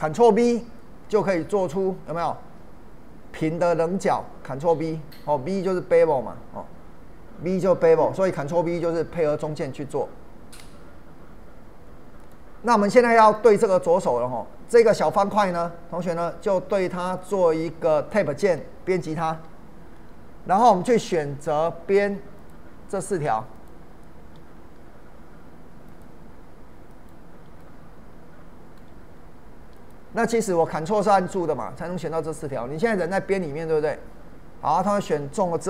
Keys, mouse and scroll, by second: 12.2 click, 12.9-15.8 middle drag, 15.8-16.9 scroll down 1, 17.2-19.3 middle drag, 19.3 Tab, 27.6-29.8 ctrl+middle drag, 29.8 ctrl+click, 30.7-35.6 middle drag.